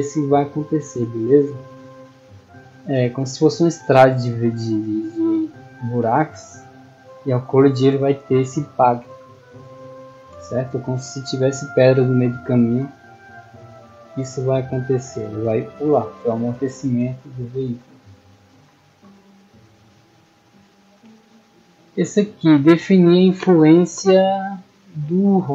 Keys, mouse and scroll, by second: 5.5-6.0 middle drag, 7.0-7.3 middle drag, 8.7-9.6 middle drag, 11.1-12.8 typing, 18.7 scroll up 2, 19.1-19.8 scroll down 2, 21.1-21.6 scroll down 4.